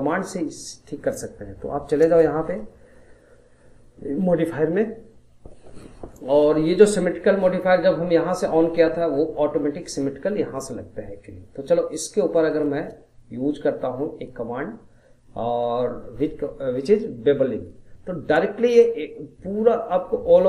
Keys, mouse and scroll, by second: 2.0 click, 12.3-15.4 drag.